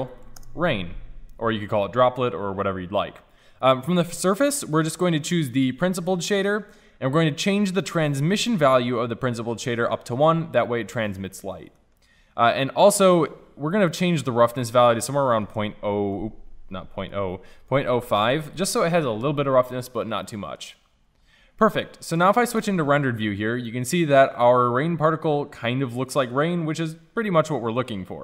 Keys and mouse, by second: 3.6-11.5 drag, 11.5-13.9 middle drag, 13.9-20.3 drag, 20.3-21.2 middle drag, 22.6 shift+z.